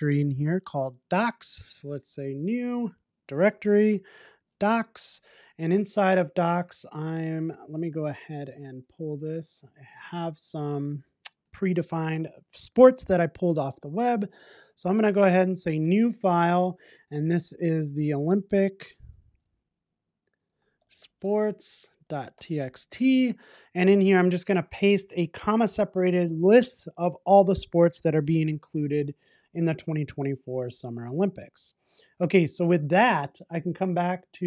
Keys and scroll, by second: 23.5 super+v, 32.9 super+s.